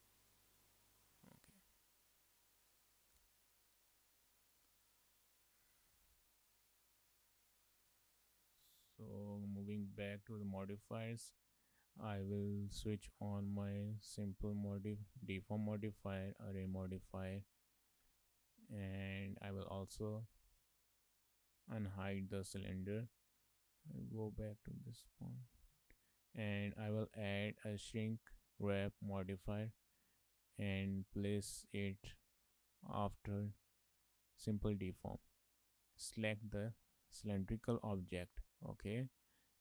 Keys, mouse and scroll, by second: 0.6 click, 4.6 Tab, 5.1 middle click, 5.8 Tab, 7.8 scroll down 3, 8.0 middle click, 8.7 Tab, 9.3 shift+middle click, 9.5 middle click, 10.5 click, 13.0 click, 16.2 click, 17.2 shift+middle click, 17.4 middle click, 18.1 Tab, 18.6 shift+middle click, 18.8 middle click, 20.2 click, 20.7 shift+middle click, 20.9 middle click, 22.0 shift+middle click, 22.2 middle click, 24.4 click, 24.8 shift+middle click, 25.0 middle click, 26.7 click, 31.4 click, 36.1 click.